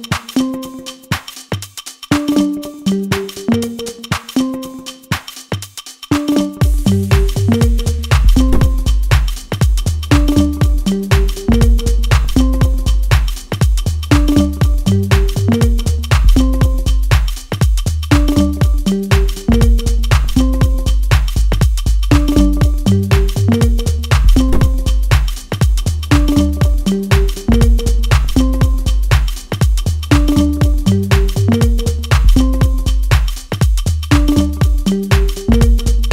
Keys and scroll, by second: 5.5 ctrl+space, 6.3 F3, 7.1 F2, 8.9 ctrl+space, 23.3 ctrl+space, 24.2 F3, 32.8 Delete, 34.0 F4.